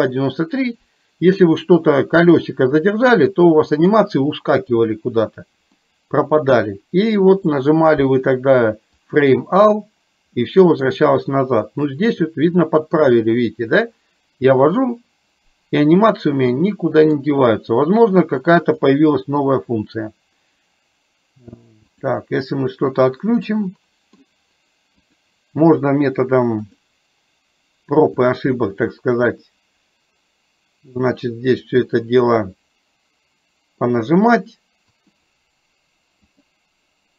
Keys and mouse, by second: 2.3-3.8 middle drag, 5.8 middle click, 7.4-9.2 drag, 10.4 middle click, 11.8-17.3 middle drag, 18.7-22.3 drag, 23.7 middle click, 25.1-27.1 drag, 28.3-31.8 drag, 32.4-33.8 middle drag, 35.1-36.6 drag.